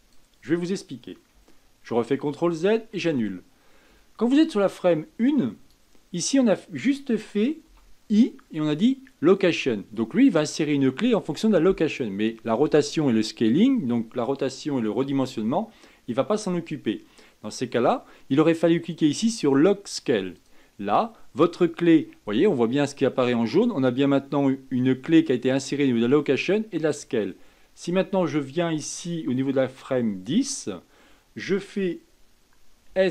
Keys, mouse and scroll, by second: 2.2 ctrl+z, 2.7 ctrl+z, 3.0 ctrl+z, 5.0-7.9 drag, 28.6-31.7 drag.